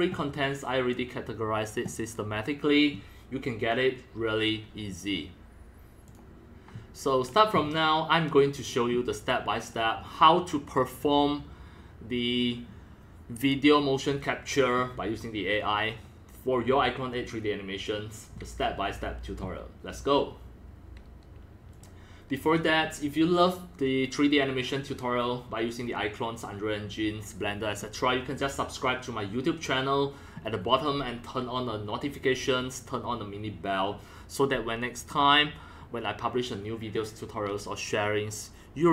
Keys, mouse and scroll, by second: 6.0-8.9 drag, 9.5-11.2 drag, 21.7-26.9 drag.